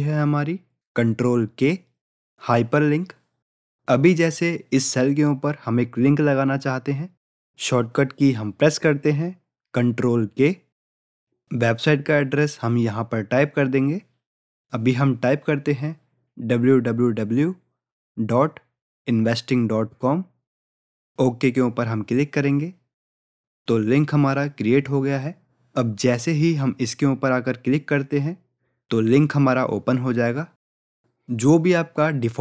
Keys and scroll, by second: 9.7 ctrl+k.